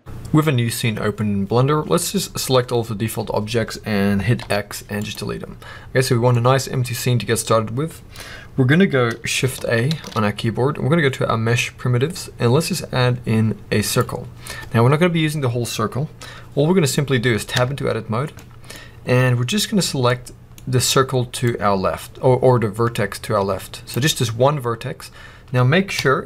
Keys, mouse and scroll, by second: 0.0-2.3 middle drag, 0.0-0.5 scroll down 2, 2.3 click, 4.3 x, 6.2-14.4 middle drag, 7.0-9.8 scroll up 2, 9.8 shift+a, 14.3 scroll up 2, 17.5 Tab, 18.3 middle click, 18.6 scroll up 1, 20.0 middle click, 20.4 scroll up 1, 21.3 click, 25.3-25.8 scroll down 1, 25.8 KP_7.